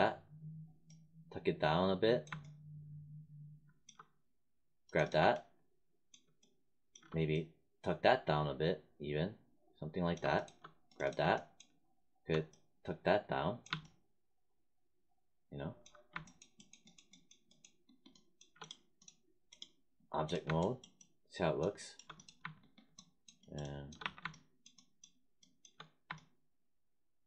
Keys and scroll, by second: 23.9 1.